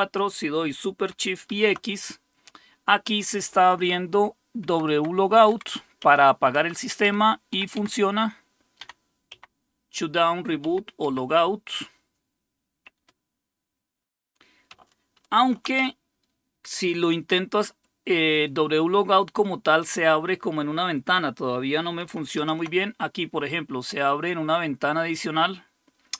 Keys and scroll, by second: 1.5 super+x, 3.6 Right, 3.8 Right, 4.7 Left, 5.0 Left, 5.5 Down, 6.0 Right, 6.6 Right, 7.1 Up, 7.5 Left, 7.8 Left, 8.8 Down, 9.3 Right, 10.1 Right, 10.6 Left, 11.0 Up, 13.0 Escape, 15.3 super+1, 22.4 super+x.